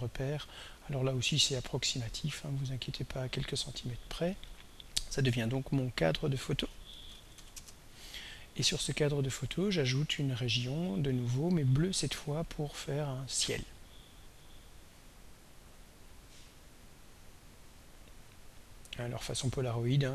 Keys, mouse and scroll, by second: 5.7 click, 6.7-7.9 typing, 13.2 click, 17.1-20.1 drag.